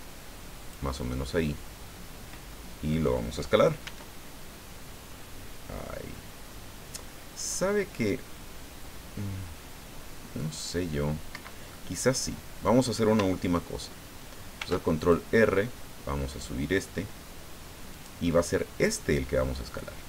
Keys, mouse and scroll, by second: 1.0-3.2 middle drag, 3.8 s, 11.3 Escape, 11.7-12.8 middle drag, 14.6 ctrl+r, 15.0 ctrl+click, 17.9 click, 18.3-20.0 middle drag.